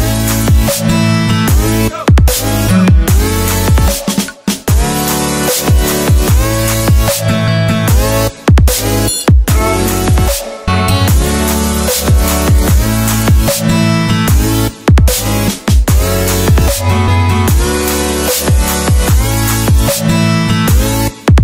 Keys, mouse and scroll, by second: 1.0 click, 5.7 Return, 6.2 right click, 11.6 click.